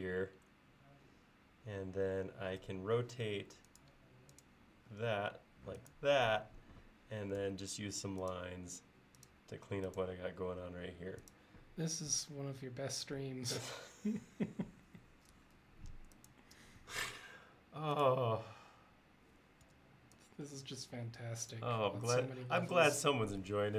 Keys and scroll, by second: 2.7 q, 7.5 l, 19.7 e.